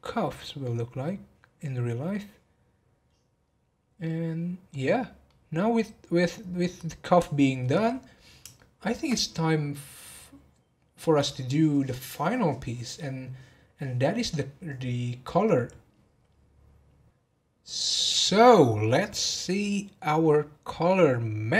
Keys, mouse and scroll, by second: 2.1-3.8 scroll down 1, 3.8 scroll down 1, 4.0-4.9 middle drag, 4.9 scroll down 1, 5.2-8.3 middle drag, 8.5-11.7 shift+middle drag.